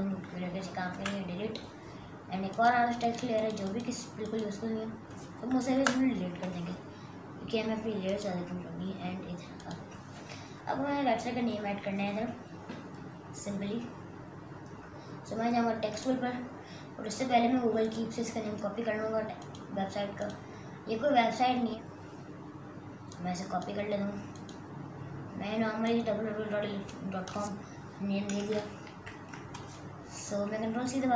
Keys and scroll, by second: 1.0 Delete, 5.8 Delete, 28.9 ctrl+c.